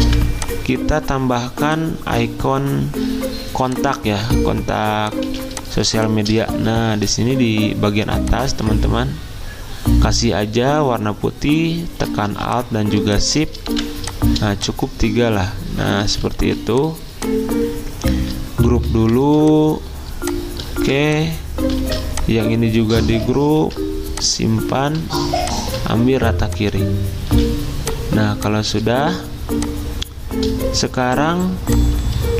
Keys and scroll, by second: 5.2 z, 6.7 z, 12.3 z, 13.7 v, 16.4 ctrl+d, 18.6 ctrl+g, 19.2 z, 20.8 v, 21.8 ctrl+z, 23.6 ctrl+g, 27.3 z, 29.3 v.